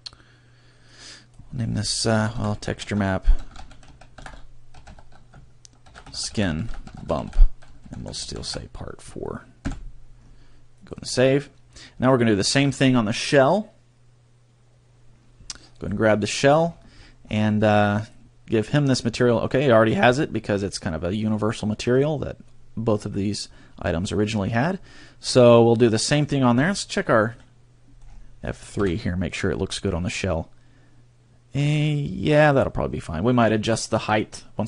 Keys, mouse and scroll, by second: 0.0 click, 21.1 right click, 21.9-23.3 scroll up 15, 23.3 click.